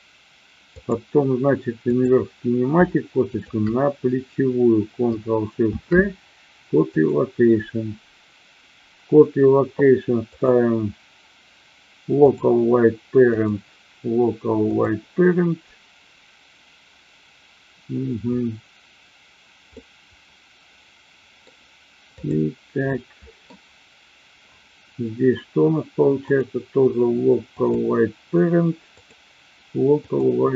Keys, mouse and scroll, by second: 0.8 click, 1.9 click, 3.4 shift+click, 5.5 ctrl+shift+c, 10.4-12.4 drag, 13.3-14.8 drag, 19.6-21.4 middle drag, 22.0 click, 22.8-23.5 middle drag, 26.1-27.8 drag, 28.9-30.3 drag.